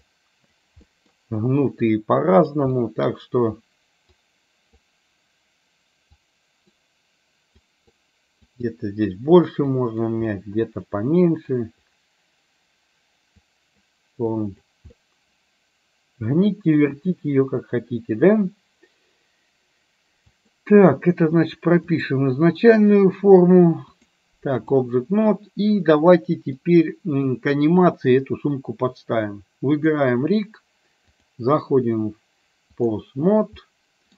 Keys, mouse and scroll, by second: 0.2 click, 0.8 middle click, 1.9 click, 2.8 middle click, 4.3 click, 6.4 click, 7.7 click, 8.6 click, 9.8 click, 10.3-11.6 middle drag, 13.4 click, 14.5 click, 14.9-16.8 middle drag, 20.5 click, 22.0 click, 24.1 click, 25.8 middle click, 31.2-32.9 drag, 33.7 middle click.